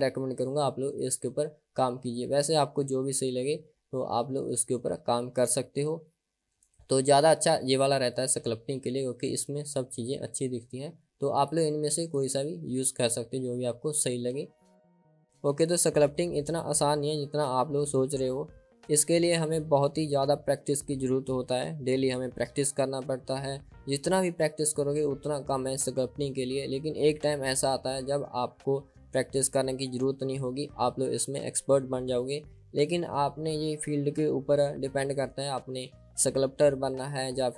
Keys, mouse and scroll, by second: 11.5-15.2 drag.